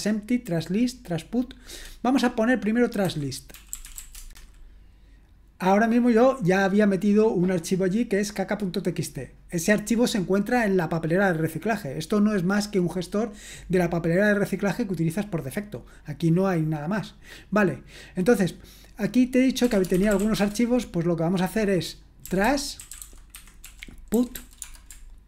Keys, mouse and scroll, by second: 3.3-4.5 typing, 19.4-20.7 typing, 22.0-25.2 typing.